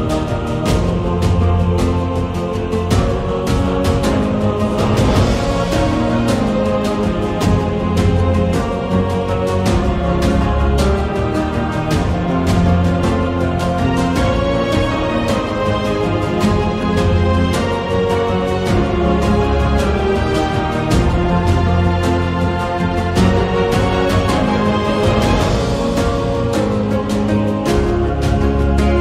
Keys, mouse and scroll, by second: 0.1 a, 0.5-2.2 middle drag, 2.8 click, 3.1 shift+middle click, 3.5 click, 3.7 Tab, 4.2 2, 4.5 click, 5.2 g, 7.3 Tab, 7.6 middle click, 9.8-11.1 drag, 11.3 middle click, 11.9 click, 12.6 middle click, 13.0 Tab, 14.0 ctrl+r, 15.5 shift+click, 17.1 x, 18.1 2, 18.2 click, 18.7 shift+middle click, 19.0 middle click, 19.2-21.7 scroll up 1, 21.7 n, 22.6 g, 24.8 middle click, 25.7 Tab, 26.1 shift+middle click, 26.6 middle click, 27.4 Tab, 28.0 3, 28.2 click, 28.5 shift+middle click, 28.9 middle click.